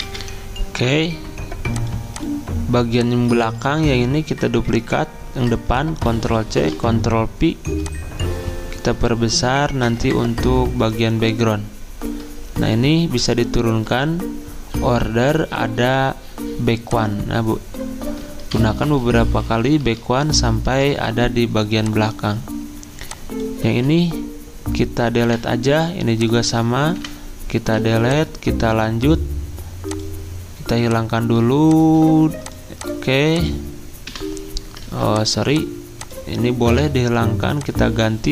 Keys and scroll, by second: 0.0 alt+Tab, 0.2 F10, 3.6 ctrl+z, 6.1 ctrl+c, 6.6 ctrl+v, 18.6 ctrl+Page_Down, 18.7 ctrl+Page_Down, 18.9 ctrl+Page_Down, 23.7 ctrl+z, 25.3 Delete, 27.0 Delete, 27.7 z, 34.1 Delete, 34.9 ctrl+z, 36.7 Delete.